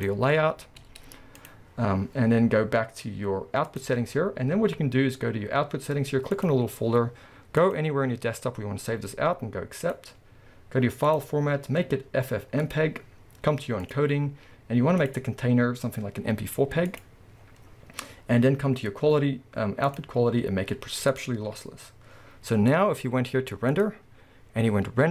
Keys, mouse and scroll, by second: 0.0 click, 0.6-1.5 scroll down 1, 1.5 z, 6.5-9.9 drag, 12.8-25.1 drag, 22.6-25.1 scroll up 2.